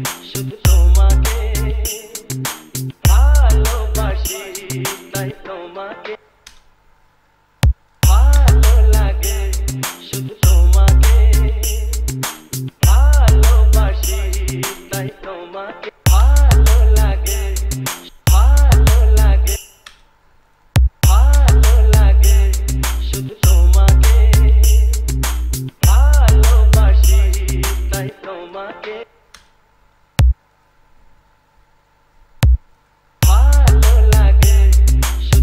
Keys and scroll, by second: 6.4 space, 8.2 space, 16.1 space, 18.2 space, 19.8 space, 21.2 space, 29.2 space, 33.4 space.